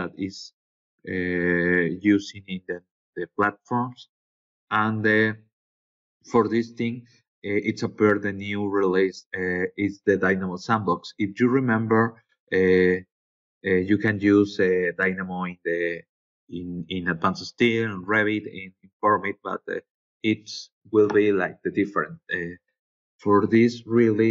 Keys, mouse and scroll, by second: 7.2 scroll down 2, 7.8-8.4 scroll down 4, 8.9-9.5 scroll down 2, 10.0-10.9 scroll down 5, 12.8 scroll down 2, 13.8 scroll down 2, 14.4 scroll down 2, 15.1 scroll down 2.